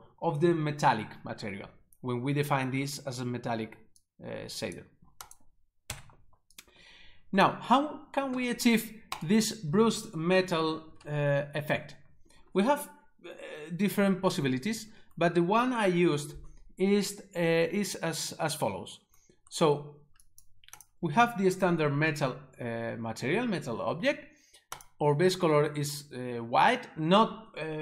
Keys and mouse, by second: 4.1 click, 5.3 click, 5.9 Delete, 6.6 click, 9.1 click, 9.2 right click, 20.3 click, 24.8 click.